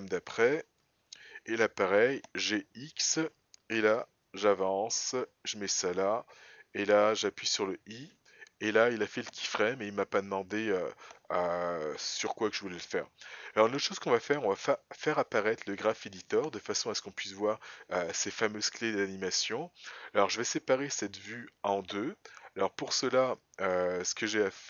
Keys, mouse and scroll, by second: 2.2 g, 12.5 click.